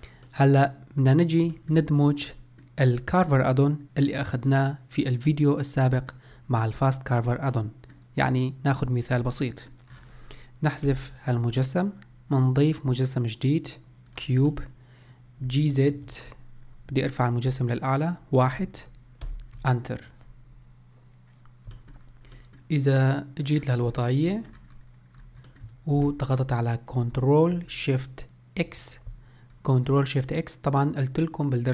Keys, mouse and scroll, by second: 7.5-10.9 middle drag, 10.9 Delete, 12.6-14.5 drag, 14.5-15.5 middle drag, 15.5 g, 21.9-23.5 middle drag, 23.5 click, 24.0-24.4 scroll up 1, 24.4-24.7 shift+middle drag, 24.7-25.2 scroll up 2, 25.2-25.5 scroll down 1, 25.5-28.7 shift+middle drag, 28.7 ctrl+shift+x.